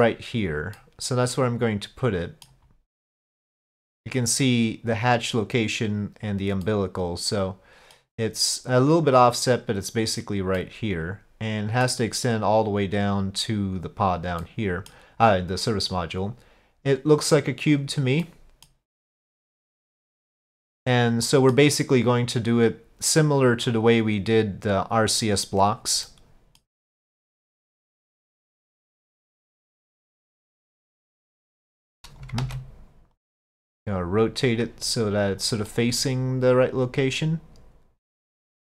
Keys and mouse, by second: 0.8-2.5 middle drag, 3.0-4.0 middle drag, 6.7-8.0 middle drag, 10.6-11.9 middle drag, 14.4-14.9 middle drag, 16.3-17.8 drag, 18.3-18.7 middle drag, 19.6-20.7 drag, 21.3 middle click, 23.3 click, 24.8-25.9 drag, 26.1-26.7 middle drag, 27.2 click, 28.4 middle click, 29.7 click, 31.3 click, 32.4 ctrl+z, 33.2-35.5 drag, 35.7 middle click, 36.9-38.7 drag.